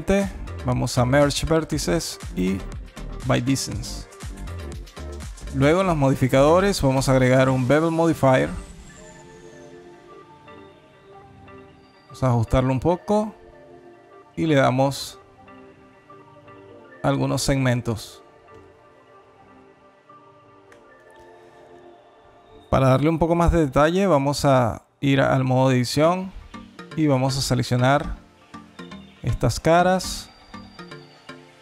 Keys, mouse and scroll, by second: 3.6 Tab, 4.9 click, 5.7 click, 9.0 shift+click, 14.3 shift+click, 16.9 click, 17.7 click, 18.4 click, 19.0 click, 20.2 alt+click, 24.9 Tab, 25.4 alt+middle click, 25.9 2, 26.5 3, 26.9 click, 27.4 alt+shift+click, 27.6 click, 28.7 alt+click, 31.2 alt+shift+click.